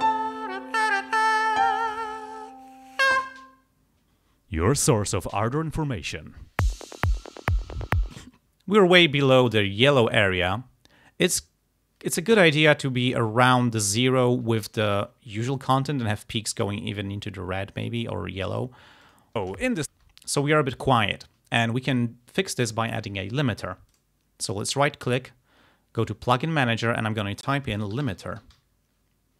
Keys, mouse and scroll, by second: 1.2 ctrl+scroll down 2, 8.3 space, 19.1 click, 19.5 space, 24.0 right click, 26.1 click, 27.4-29.1 typing.